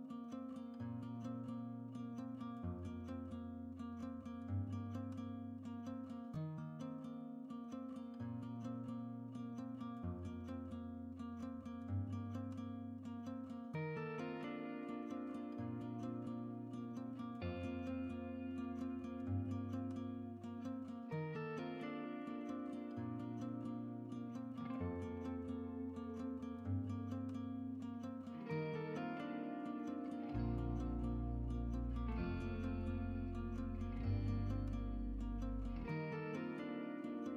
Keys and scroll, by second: 35.8 shift+Tab.